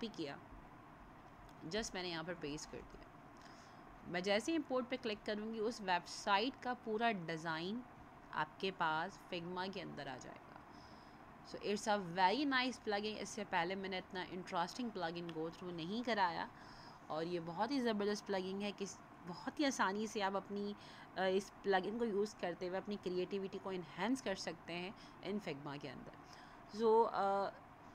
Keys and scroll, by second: 2.8 ctrl+v.